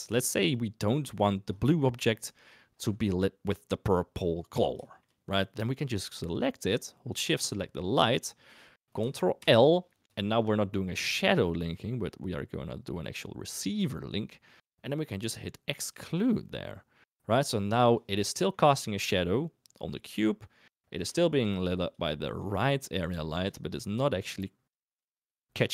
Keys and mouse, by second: 0.2 shift+middle click, 1.9 click, 4.8 shift+drag, 7.4 shift+click, 9.3 ctrl+l, 17.8 click, 18.3-18.7 middle drag, 20.5 middle drag, 21.1 shift+middle drag, 21.9 click, 23.2 shift+middle drag, 24.0 shift+middle drag.